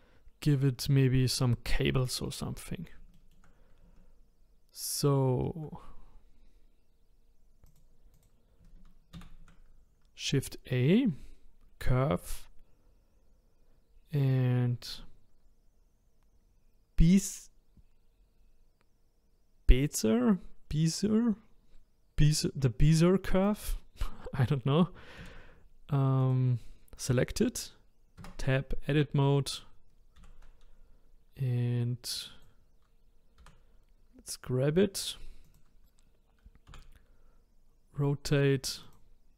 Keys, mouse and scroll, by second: 2.6-3.1 scroll down 2, 3.1-6.1 shift+middle drag, 7.6 click, 8.1 click, 9.1 shift+a, 25.2 a, 26.2 click, 28.2 Tab, 30.2 a, 32.1 click, 33.4 g, 36.7 r.